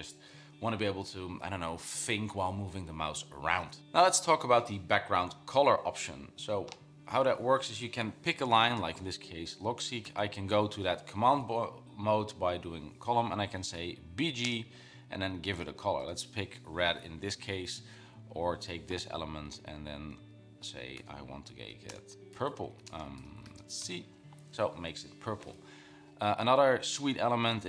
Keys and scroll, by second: 10.2 shift+;, 13.5-16.4 typing, 18.3 Down, 19.8 Down, 20.2 Up, 21.1-24.4 typing, 26.1 Down, 26.5 Down.